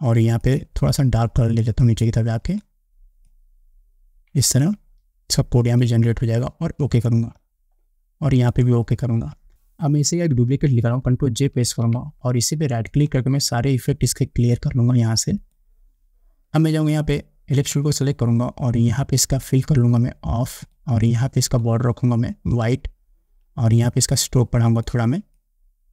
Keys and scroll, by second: 11.8 ctrl+j.